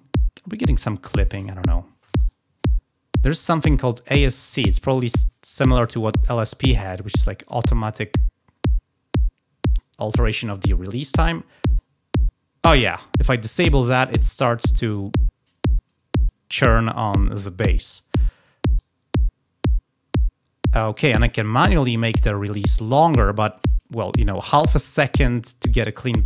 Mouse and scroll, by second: 2.0-3.1 drag, 11.6 click, 18.7-23.0 drag.